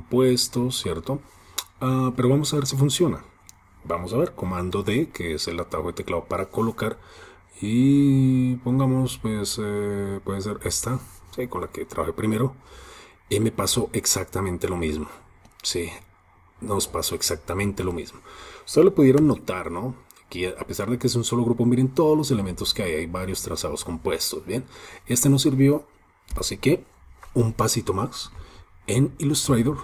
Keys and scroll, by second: 4.6 super+d.